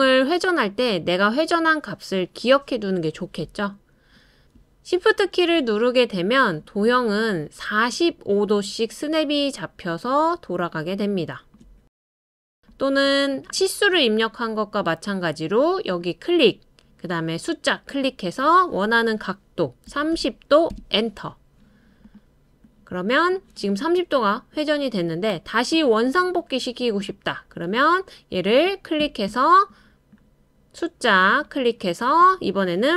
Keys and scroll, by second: 19.9 typing, 20.7 Return.